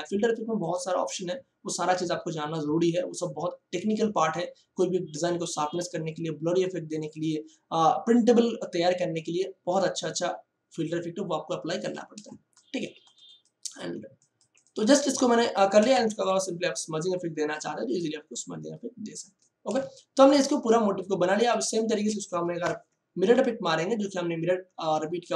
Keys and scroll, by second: 15.8 j, 19.7 space, 22.6 alt+F9.